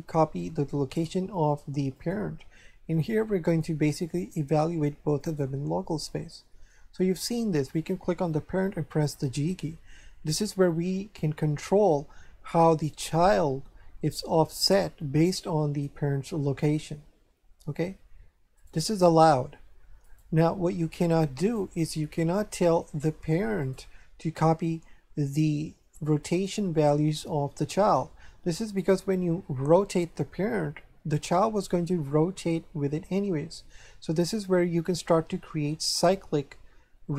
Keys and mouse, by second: 1.9 click, 6.3 shift+middle click, 7.7 right click, 9.2 g, 18.5 right click, 20.0 right click, 21.4 click, 22.8 shift+middle click, 23.6 right click, 26.3 right click, 28.7 right click, 30.0 r, 31.2 right click.